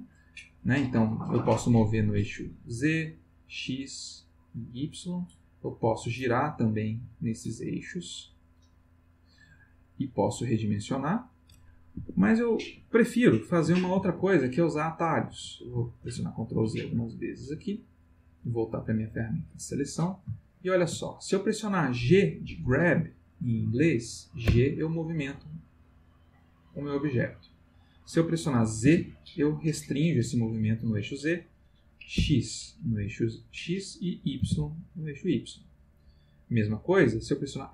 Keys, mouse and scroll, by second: 1.8 click, 2.9 click, 4.3 click, 5.7 click, 6.7 click, 8.5 click, 9.9 click, 10.8-12.4 drag, 11.9 Escape, 13.9 ctrl+z, 15.3 ctrl+z, 18.0 click, 20.4-21.0 ctrl+middle drag, 24.4 g, 28.8 z, 32.1 x, 34.4 y, 36.5 click.